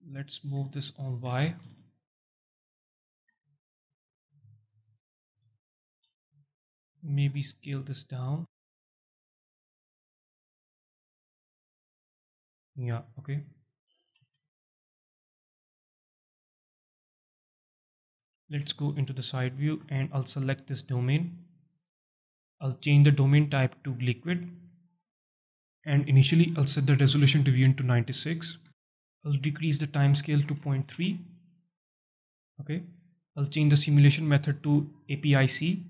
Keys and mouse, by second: 1.0 g, 1.2 y, 3.1 shift+click, 3.4-4.8 alt+drag, 5.3 KP_1, 5.9 z, 7.0 alt+shift+drag, 7.5 s, 9.9 right click, 11.0 s, 12.5 shift+click, 13.5-14.0 alt+drag, 14.1 z, 14.4 alt+click, 15.9-16.5 alt+drag, 17.0 alt+click, 17.8 alt+click, 18.5 KP_1, 19.8 shift+click, 19.9 alt+shift+middle drag, 21.1 alt+shift+middle drag, 22.4 alt+shift+middle click, 23.4-24.2 drag, 25.4-29.0 drag, 29.7-31.9 drag, 34.1-35.0 drag.